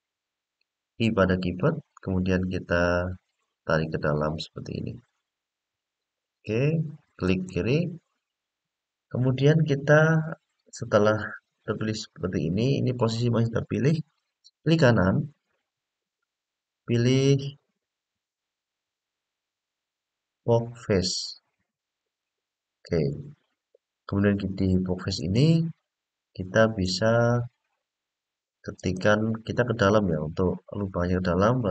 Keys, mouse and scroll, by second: 1.1 i, 7.0 click, 15.2-22.0 drag, 15.2 right click, 24.9 click, 26.6-31.7 drag.